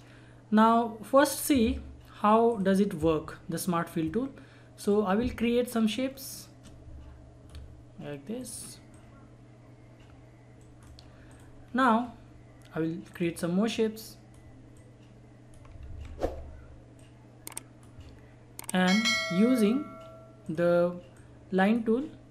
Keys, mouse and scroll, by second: 4.8-10.6 drag, 10.6 right click, 11.3 click, 11.6 scroll down 1, 12.0-12.4 scroll up 1, 13.1-15.8 drag, 15.8 ctrl+z, 17.0-22.3 drag.